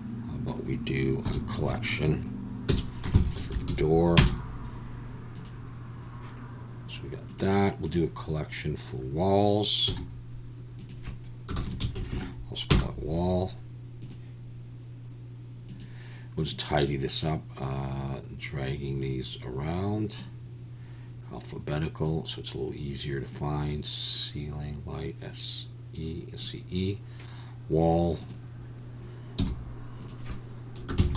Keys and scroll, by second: 1.2 m, 3.5 o, 9.9 m, 12.1 l, 29.4 m.